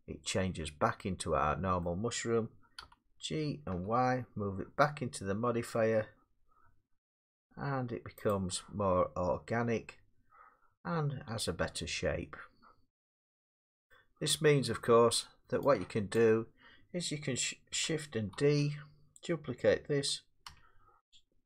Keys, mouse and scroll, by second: 1.8 middle click, 2.8 g, 3.7 y, 6.4-6.8 scroll, 8.3 click, 13.9 middle click, 16.1 shift+click, 18.3 shift+d, 20.5 g.